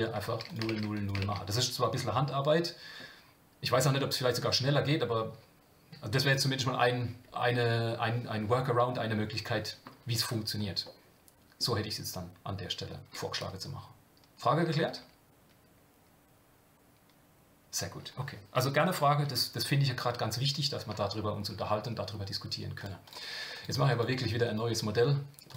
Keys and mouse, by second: 1.0 click, 2.3-3.0 middle drag, 10.8 middle click, 22.8 drag, 23.7-25.5 drag.